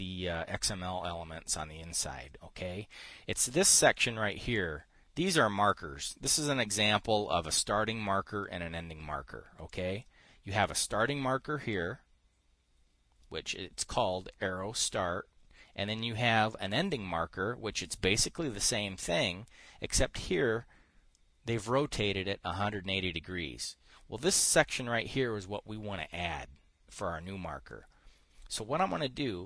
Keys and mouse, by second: 5.0-6.3 drag, 10.2 click, 11.1-12.3 drag, 14.3 click, 17.0-18.8 drag, 20.7 click, 21.6-23.1 drag.